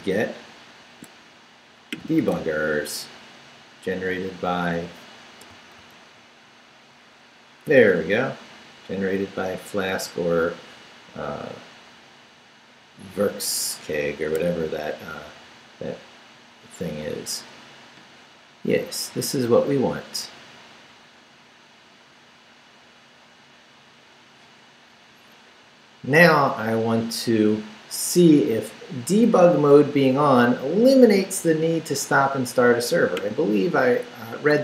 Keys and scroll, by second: 2.2 super+r, 5.8 super+r, 34.3 Up.